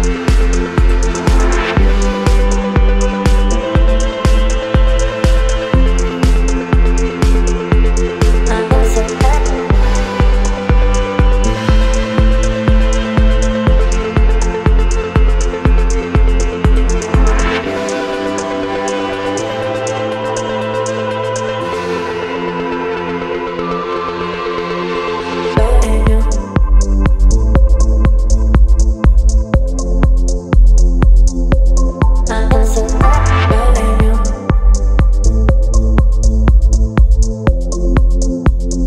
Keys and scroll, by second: 6.6 space, 27.1 space.